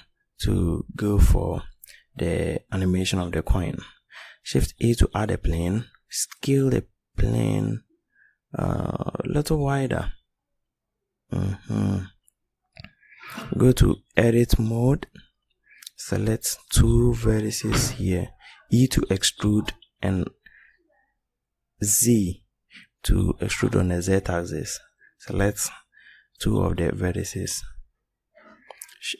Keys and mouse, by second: 0.6-2.2 middle drag, 3.2 shift+a, 5.8 s, 10.1-14.2 middle drag, 14.3 Tab, 18.3 e, 28.0 ctrl+b.